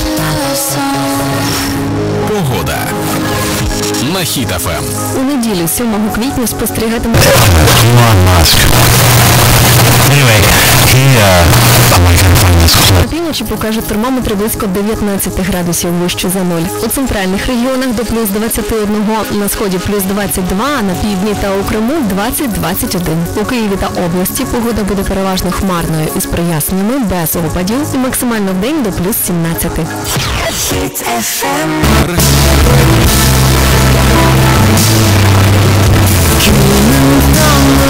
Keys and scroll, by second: 13.0 Page_Down, 37.8 space.